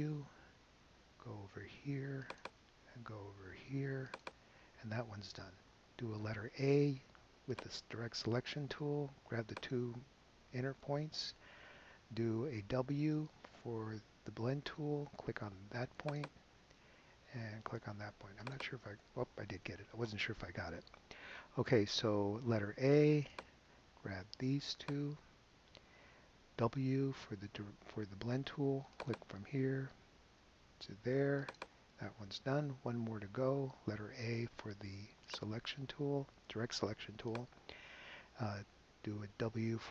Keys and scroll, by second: 6.3 a, 12.8 w, 22.7 a, 26.7 w, 34.0 a, 39.8 w.